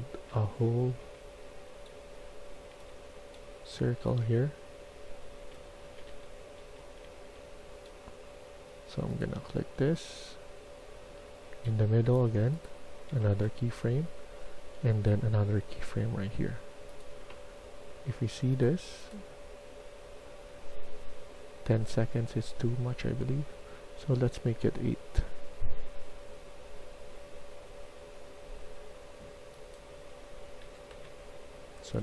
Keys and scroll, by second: 0.0-0.9 typing, 2.6 s, 5.4-7.3 typing, 9.6-11.0 d, 13.3-14.6 typing, 30.6-32.0 typing.